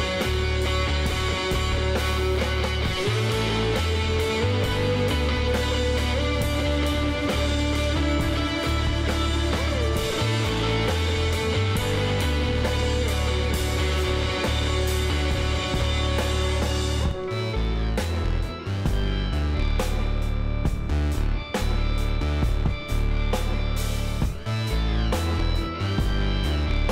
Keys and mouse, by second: 3.5-5.2 middle drag, 4.3 ctrl+z, 6.4 click, 7.4 middle click, 9.1-10.7 drag, 11.1-16.4 middle drag, 16.4 shift+s, 21.4-23.2 drag, 22.5 x, 25.2 shift+a.